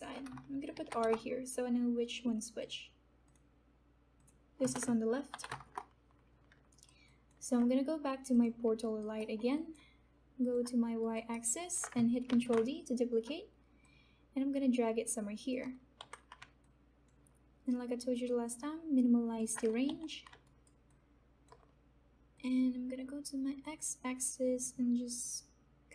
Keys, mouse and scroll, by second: 0.0 BackSpace, 0.7 shift+r, 1.0 Return, 2.2 Return, 2.2 click, 4.0 click, 4.6 space, 5.3 shift+l, 5.6 Return, 6.7 alt+right click, 7.0 alt+click, 8.8 alt+right click, 9.3 alt+middle click, 9.9 alt+click, 11.0 alt+right click, 11.7 alt+middle click, 12.3 ctrl+d, 14.1-16.3 drag, 16.3 f, 16.6-19.8 alt+drag, 20.0 f, 20.4 alt+right click, 20.8 alt+click, 23.9 click.